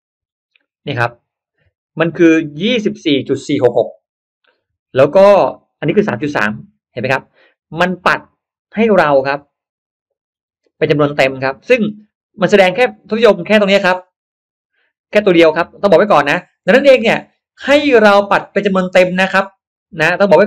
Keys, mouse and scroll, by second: 1.3 middle click.